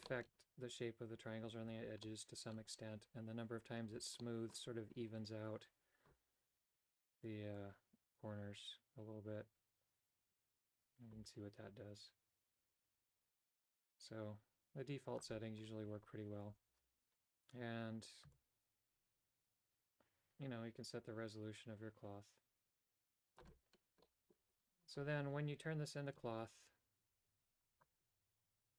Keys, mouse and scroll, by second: 0.0 middle click, 1.9 middle click, 4.1 middle click, 7.5-15.2 drag, 18.3-23.4 shift+drag, 24.0 middle click, 24.8-26.6 right drag, 26.6 click, 27.3 Tab, 27.7 right click.